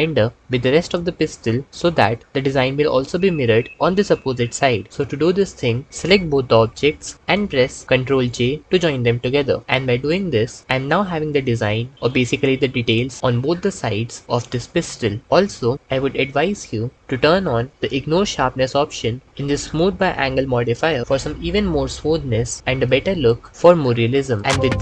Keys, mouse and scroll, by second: 8.1 ctrl+j, 23.5 Escape.